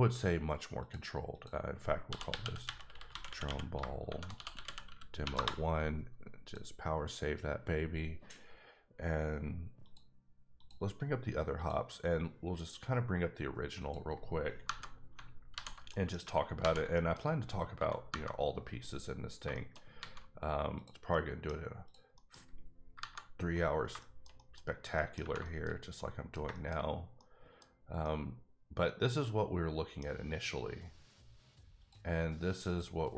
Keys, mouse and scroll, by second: 0.8 click, 1.3 click, 2.3-5.2 typing, 5.3 Return, 6.4 click, 9.8 click, 10.6 click, 11.6 click, 13.8 click, 15.5 alt+h, 15.9 middle click, 16.6 alt+h, 16.9 middle click, 18.2 KP_Divide, 19.2 scroll down 2, 19.5 shift+middle click, 19.9 alt+a, 20.7 click, 21.1 middle click, 21.5 scroll down 1, 21.8 click, 22.1 middle click, 24.0 shift+middle click, 24.6-24.9 scroll up 3, 24.9 middle click, 25.4 shift+middle click, 25.7 scroll up 1, 26.0 middle click, 26.4 shift+middle click, 26.8 scroll up 1, 27.2 middle click, 28.0 middle click, 31.8 click, 32.7 click.